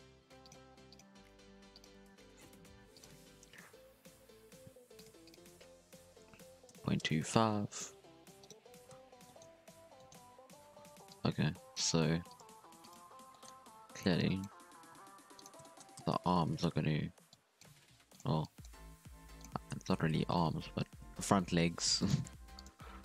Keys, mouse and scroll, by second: 0.6 r, 1.0 g, 2.9 click, 4.9 click, 5.2 click, 7.6-7.9 scroll up 2, 7.9 z, 8.4 right click, 8.6 Tab, 8.9 z, 9.2-9.6 shift+middle drag, 9.6 alt+a, 9.9 shift+middle drag, 10.1 scroll up 1, 10.4 z, 11.0 click, 12.0 r, 12.4 g, 13.3 shift+middle click, 13.9 alt+a, 14.1 click, 14.5 g, 15.6 shift+middle click, 15.9 z, 16.2-16.5 scroll down 2, 16.5 alt+a, 17.3 drag, 17.7 g, 18.4 click, 18.7 g, 20.3 alt+a, 21.0 z, 22.0 alt+shift+right click, 22.3-23.0 typing.